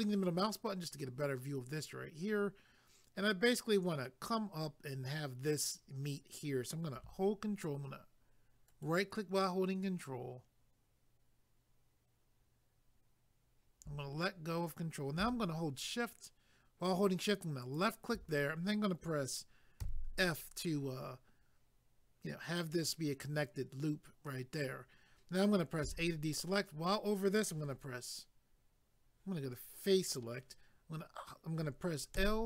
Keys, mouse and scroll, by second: 8.7 ctrl+right click, 17.6 shift+click, 30.1 click, 32.2 l.